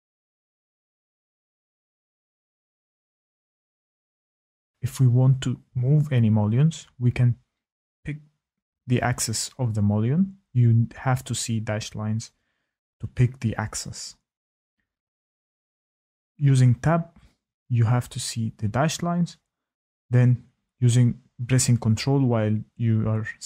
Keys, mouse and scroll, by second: 0.1 shift+click, 3.5 Tab, 3.8 Tab, 6.1 click, 7.0 Tab, 7.3 Tab, 11.2 click, 12.6 Tab, 13.9 ctrl+click, 15.4 Tab, 16.1 ctrl+click, 16.9 Tab, 17.3 Tab, 18.3 ctrl+click, 21.5 click, 22.5 click, 23.4 click.